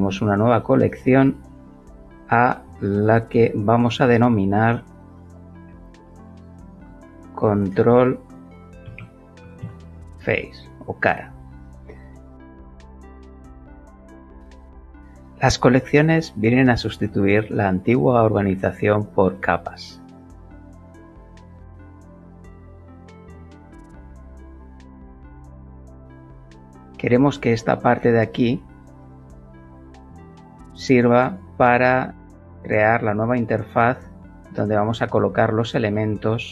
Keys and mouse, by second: 0.6 click, 0.9 click, 5.6-7.7 typing, 8.8 shift+f, 8.9 a, 9.4 c, 9.6 e, 12.0 Return, 23.3 click, 25.8 click, 34.0 middle click, 34.3-36.4 middle drag, 36.4 click, 36.4-36.5 middle drag.